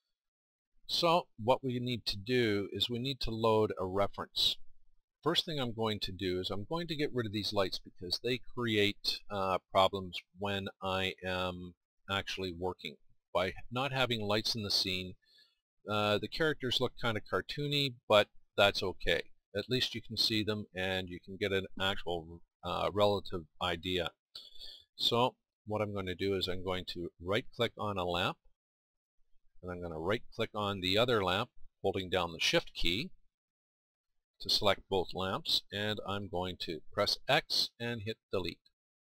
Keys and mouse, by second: 0.0-1.3 middle drag, 1.9 KP_1, 5.0-12.5 middle drag, 13.0-15.3 middle drag, 19.5-25.0 middle drag, 28.8-38.4 drag.